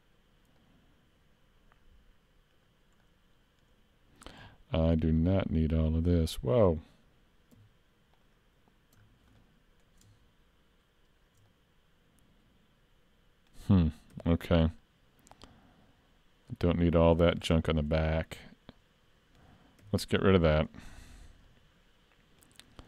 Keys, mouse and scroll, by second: 0.6 middle click, 3.1 middle click, 5.2 alt+shift+click, 6.8-7.6 scroll up 1, 7.6-8.2 scroll up 1, 8.2 alt+click, 9.0 scroll down 3, 9.4 middle click, 11.5 middle click, 14.1 c, 17.9 middle click, 19.9 x, 21.2 scroll down 1, 21.5 middle click, 22.7 scroll up 3.